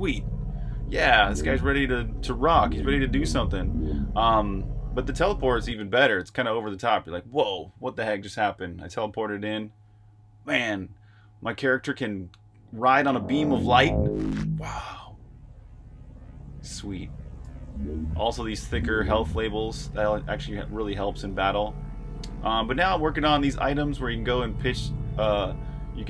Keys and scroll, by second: 0.9 j, 2.2-4.0 typing, 5.8 super+q, 7.1 super+h, 7.1-8.0 typing, 17.3 h, 18.5 typing, 19.9 typing, 20.9-23.6 typing, 24.9-26.0 typing.